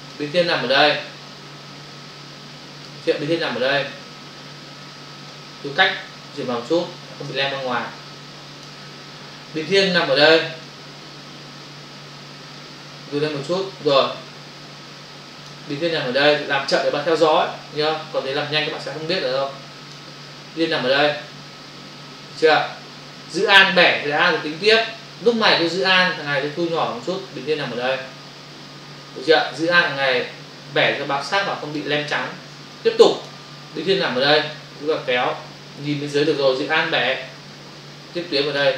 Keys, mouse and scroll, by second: 1.3 click, 3.9 click, 5.4 space, 10.7 click, 12.6 space, 16.7 click, 21.1 click, 26.7 alt+click, 30.8 alt+click, 32.5 space, 34.5 click.